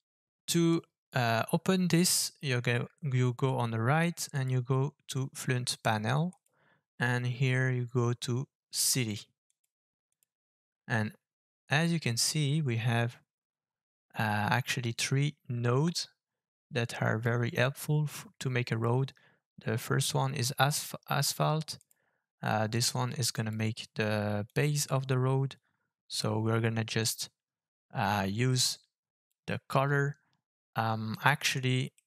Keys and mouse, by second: 4.3 click, 6.4-9.6 drag, 10.2-21.9 drag, 22.8 click, 24.5-29.4 drag, 31.2 middle click.